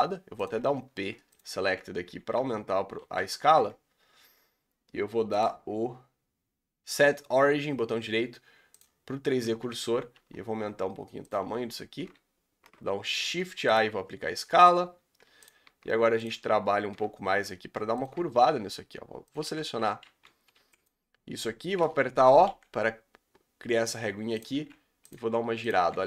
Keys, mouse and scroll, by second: 0.4 p, 0.5 Tab, 0.8-1.6 scroll down 4, 1.3 click, 1.6 g, 2.3 Tab, 3.1 a, 3.2 scroll down 3, 4.0-8.7 scroll up 2, 8.7 right click, 9.4 Tab, 9.7 Tab, 9.9 scroll down 3, 10.1 s, 11.4-13.7 scroll up 4, 13.7 ctrl+a, 13.9 Tab, 14.3 scroll up 1, 15.4 alt+click, 19.4-22.4 typing, 24.5 r, 25.1 g, 25.7 r.